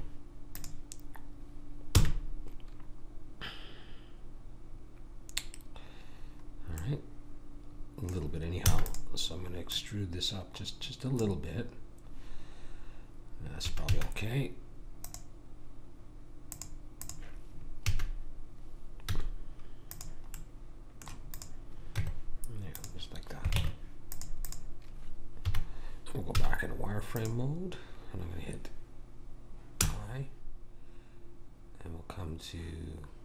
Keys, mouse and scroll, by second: 2.0 f, 6.8-8.6 middle drag, 8.6 e, 9.7 click, 13.6 a, 13.9 a, 17.9 a, 19.1 z, 21.3 click, 21.3-22.3 right drag, 21.9 Tab, 23.5 ctrl+Tab, 24.4 click, 25.6 KP_1, 26.8 z, 29.9 i.